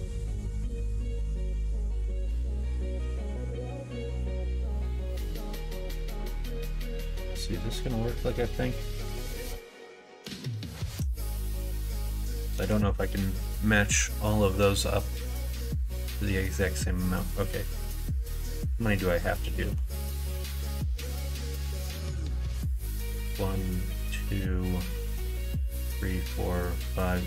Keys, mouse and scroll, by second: 2.9 middle click, 3.5 shift+middle click, 4.2 middle click, 10.4 middle click, 11.1 middle click, 12.2 KP_1, 12.6 KP_Enter, 12.6 KP_3, 15.5 shift+middle click, 19.3 ctrl+z, 19.5 ctrl+z, 19.7 ctrl+z, 19.8 ctrl+z, 20.3 ctrl+z, 21.1 ctrl+z, 22.5 shift+middle click.